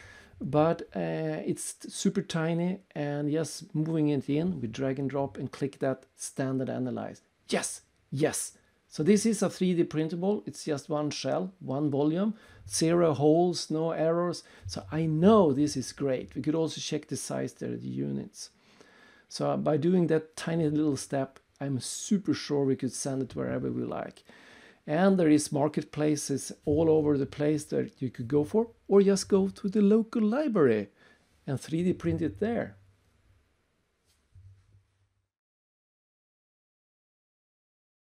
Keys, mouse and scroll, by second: 1.2 right click, 3.9 click, 5.4 click, 17.6 click, 18.3 click, 19.0 click.